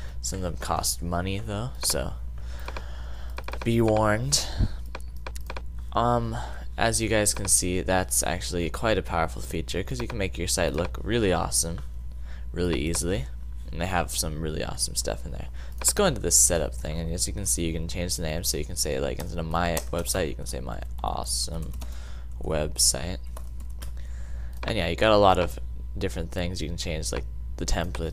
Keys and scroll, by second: 18.9-24.1 typing.